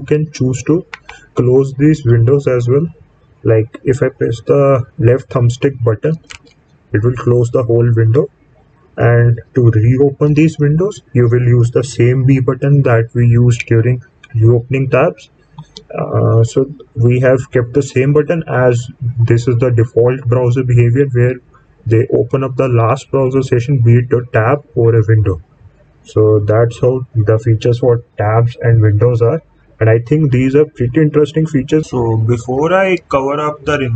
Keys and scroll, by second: 15.5 b.